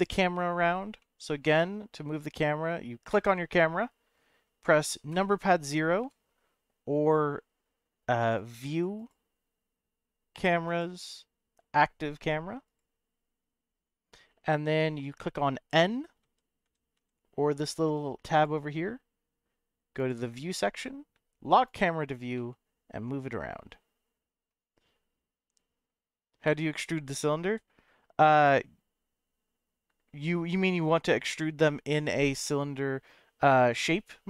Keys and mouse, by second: 1.0-2.1 middle drag, 3.1 click, 5.1 KP_0, 8.3 click, 8.7 click, 8.9-12.8 drag, 16.2 n, 16.6 n, 16.9 n, 18.3 click, 19.9 click, 21.6 click, 22.3-24.5 middle drag, 26.5 n, 27.4 n.